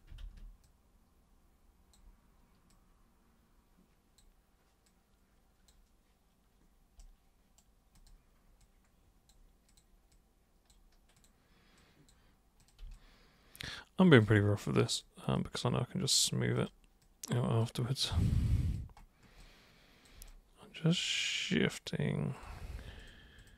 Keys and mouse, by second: 0.2 ctrl+super+z, 0.6-1.9 super+drag, 2.7 super+click, 4.9 super+click, 7.0 super+right click, 8.0 super+click, 8.6 super+click, 9.7 super+click, 10.1 super+click, 11.2 super+click, 11.8 super+click, 12.6 super+click, 12.9-14.3 alt+super+drag, 14.9 super+click, 15.4-16.2 super+drag, 16.5 super+click, 17.0 super+click, 18.2 alt+super+click, 19.4 alt+super+click, 20.3 super+right click, 22.3 super+click, 23.0 ctrl+shift+super+click, 23.4 ctrl+shift+super+click.